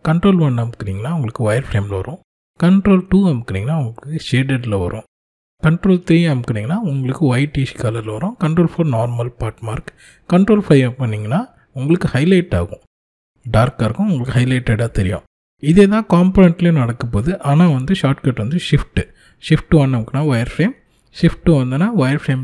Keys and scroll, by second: 2.1 ctrl+2, 5.9 ctrl+3, 7.4 ctrl+4, 10.2 ctrl+5, 17.0 shift+1, 20.6 shift+2.